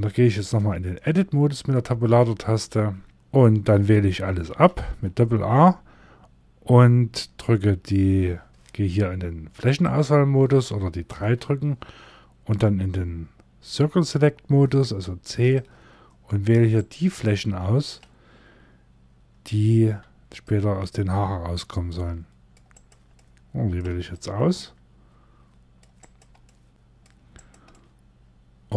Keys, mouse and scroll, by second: 0.5 middle click, 2.0-2.5 scroll up 2, 3.1 right click, 3.1 3, 3.1 a, 3.8 a, 9.4 click, 10.6 3, 14.3 c, 16.7 middle click, 19.3 c, 22.7 middle click, 23.4 c, 26.0 middle click, 26.7 c, 27.2 middle click.